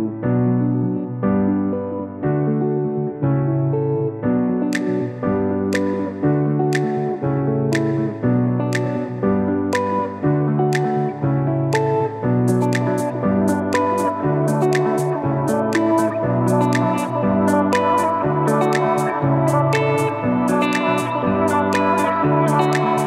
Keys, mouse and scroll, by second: 0.4 i, 1.8 shift+click, 4.8 scroll up 1, 5.2-5.8 typing, 6.2-23.0 shift+drag.